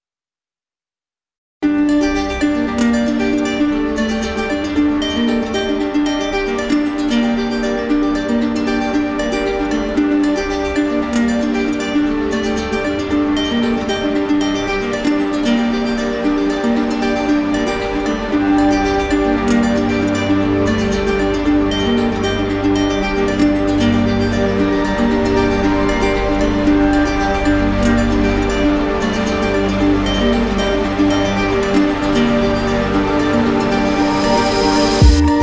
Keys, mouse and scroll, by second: 1.4 click, 1.7 ctrl+z, 4.9 click, 5.3 ctrl+z, 8.5 ctrl+z, 8.5 ctrl+click, 28.1 click, 29.7 z, 30.7 click, 31.7 right click, 33.5 click.